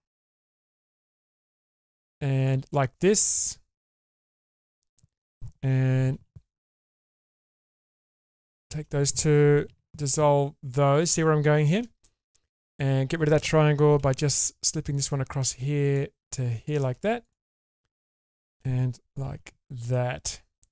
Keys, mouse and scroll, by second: 1.2 click, 2.4 shift+click, 6.8 click, 7.4 click, 8.3 shift+click, 9.7 ctrl+x, 10.2-11.2 middle drag, 11.4 shift+middle click, 12.0 middle click, 14.0 k, 17.2 click, 18.2 shift+click, 19.2 ctrl+x, 19.6-19.9 scroll down 1, 19.9 middle click.